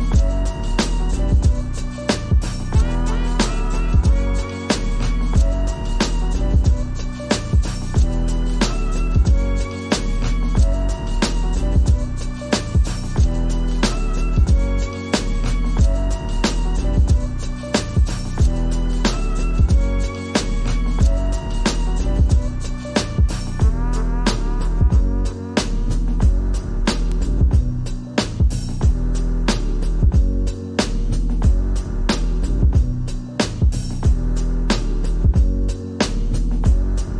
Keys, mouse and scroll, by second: 0.0 s, 1.0 s, 4.4-6.6 right drag, 6.6 click, 6.8 Tab, 7.0-11.3 typing, 14.1-15.4 drag, 15.6 Tab, 15.8 right click, 16.0 /, 16.2 middle click, 16.6 right click, 17.1 click, 17.8 /, 17.9-18.9 scroll down 1, 18.9 click, 21.5-25.7 drag, 25.7 shift+middle click, 25.7 a, 26.3 click, 26.5 Tab, 26.7 a, 26.9 r, 27.5 g, 28.2 click, 30.2 click, 30.4 Tab, 30.6 click, 30.6 middle click, 30.9-35.0 typing, 31.3 middle click, 31.8 middle click, 32.5 middle click, 33.2 middle click, 34.0 middle click, 34.6 middle click, 35.7 middle click, 36.5 KP_3, 37.1 click.